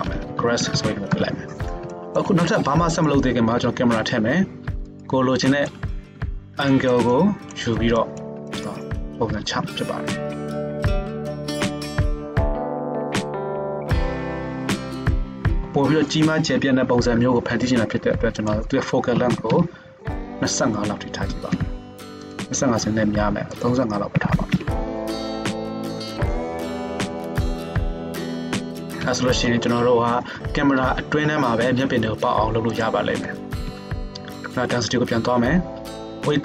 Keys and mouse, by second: 0.0-11.5 shift+drag, 0.7 s, 3.8 shift+a, 6.2 KP_1, 9.4 ctrl+alt+KP_0, 10.5 n, 11.1 g, 11.5-15.2 shift+middle drag, 11.5 q, 14.9 q, 15.2 click, 15.3-18.4 middle drag, 18.4-22.4 drag, 21.3 g, 22.4-23.6 middle drag, 23.6-26.2 drag, 25.3 g, 26.2-32.7 middle drag, 27.0 g, 27.7 r, 28.3 g, 32.7 click, 32.9-36.4 middle drag, 33.6 n, 36.0 ctrl+Tab.